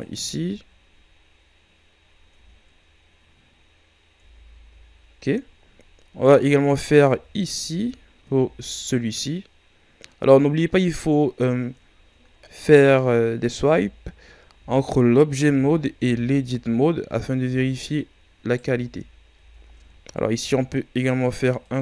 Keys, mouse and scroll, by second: 0.2 z, 2.0 scroll down 2, 2.3 Tab, 3.1 scroll up 2, 4.1 Tab, 5.4-7.0 ctrl+scroll up 3, 7.0 z, 7.6 z, 8.3 Tab, 8.5-10.0 scroll down 2, 10.3 scroll down 3, 11.2-11.6 scroll up 3, 12.4-12.9 shift+scroll down 1, 12.9-13.6 scroll up 1, 13.6 Tab, 14.5 z, 15.4 z, 16.0 Tab, 16.4 scroll down 1, 17.0 scroll up 4, 17.3 Tab, 17.8 right click, 18.7 Tab, 19.2 Tab, 20.3 ctrl+r, 21.5 click.